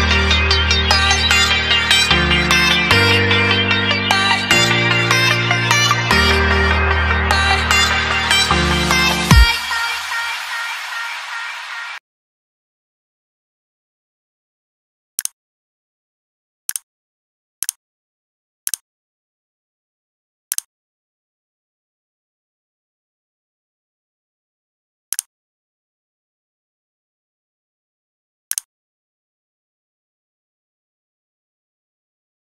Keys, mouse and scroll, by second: 7.7 click, 9.3 click.